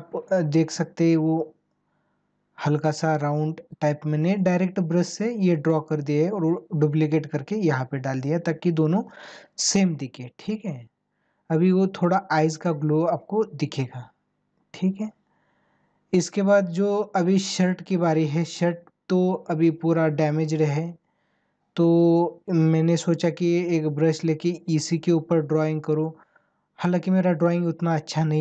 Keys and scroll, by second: 1.1 ctrl+-, 10.8 ctrl+=, 13.9 ctrl+-, 17.0 ctrl+-.